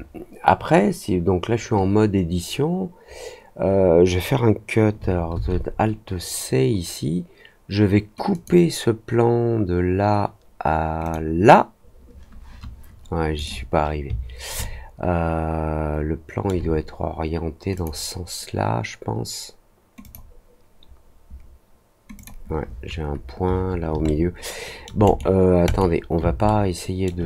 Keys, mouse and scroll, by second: 8.3 click, 11.0 click, 13.3 right click, 14.5-16.4 alt+middle drag, 17.7 click, 19.9 click, 22.1 click, 24.0 alt+middle click, 25.0 right click, 25.6 right click, 26.4 alt+middle click.